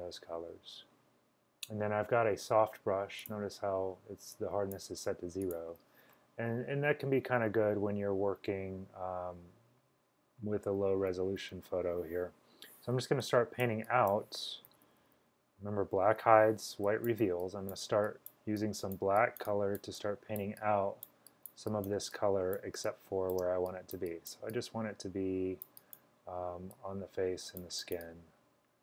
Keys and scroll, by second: 14.7-16.1 typing, 22.8 space, 23.3 space, 26.2-26.9 typing.